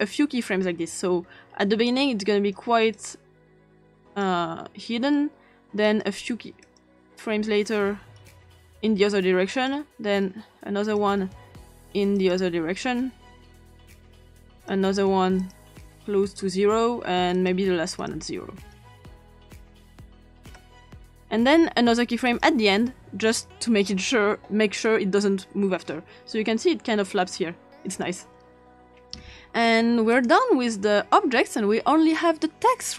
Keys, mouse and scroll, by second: 0.0-1.9 drag, 2.9 click, 4.0 click, 5.8 click, 6.6 click, 8.3 click, 9.5 click, 10.8 click, 12.2 click, 14.6 click, 15.4 click, 16.4 click, 17.3 click, 18.0 click, 19.2 click, 20.1 0, 20.4 Return, 22.3 click, 23.2 click, 24.9-28.1 drag, 29.0-30.1 ctrl+scroll down 2, 30.1 click, 32.7 click.